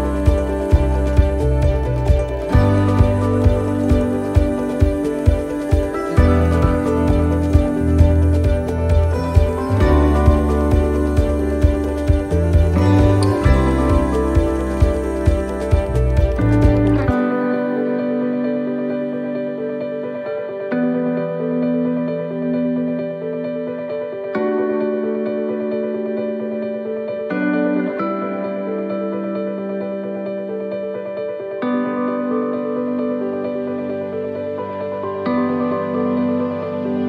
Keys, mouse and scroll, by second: 1.6 shift+middle click, 2.2 scroll down 1, 2.7 shift+middle click, 5.2 shift+right click, 6.2 shift+d, 8.2 click, 10.1 shift+middle click, 10.5-10.9 scroll up 4, 10.9 shift+middle click, 12.8 click, 14.7 click, 16.0 shift+middle click, 16.6 scroll up 2, 17.1 right click, 18.4-21.5 typing, 22.9 x, 24.6 shift+middle click, 25.1 scroll up 2, 25.5 middle click, 26.5-27.1 scroll down 5, 27.2 shift+middle click, 27.9 scroll up 1, 28.6 right click, 29.5-34.8 typing, 36.2 middle click, 36.8 shift+middle click.